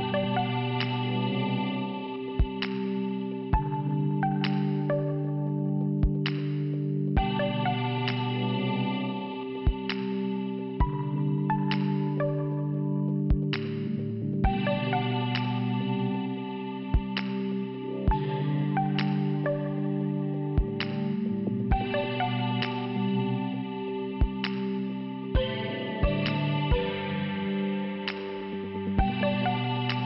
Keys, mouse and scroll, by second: 1.2 click, 4.2 Return, 4.7 scroll down 2, 6.4-6.8 scroll up 2, 8.4 click, 9.5 click, 10.5 click, 11.2 Return, 13.9 click, 14.1 click, 14.8 Return, 15.0 click, 17.7 click, 19.0 middle click, 19.6 click, 19.8 click, 20.2 click, 20.3 click, 21.1 click, 22.7 click, 28.5 click, 29.9 middle click.